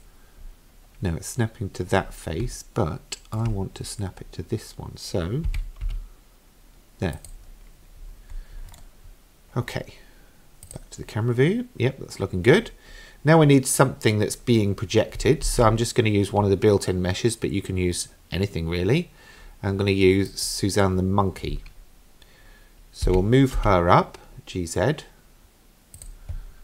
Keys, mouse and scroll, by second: 0.4-2.1 scroll up 1, 2.1-2.6 scroll up 2, 2.6-3.4 shift+middle drag, 3.8-5.5 scroll up 4, 5.5 g, 8.0-8.8 scroll down 6, 8.8 middle click, 10.7 click, 15.5 shift+a, 23.0 g.